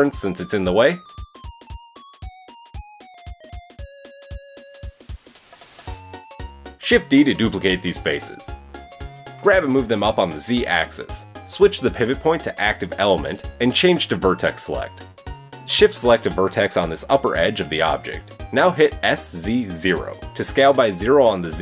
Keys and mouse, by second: 1.3 shift+middle click, 1.3 shift+right click, 1.9 shift+middle click, 1.9 shift+right click, 6.8 shift+d, 7.6 g, 10.5-12.8 middle drag, 12.8-21.6 drag, 19.6 s.